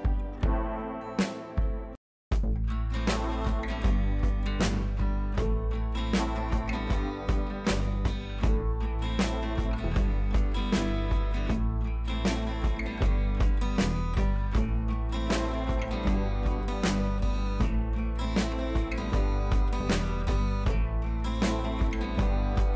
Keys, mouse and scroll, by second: 1.1 click, 3.2-13.5 drag, 14.2-14.8 scroll up 1, 15.9-20.9 drag.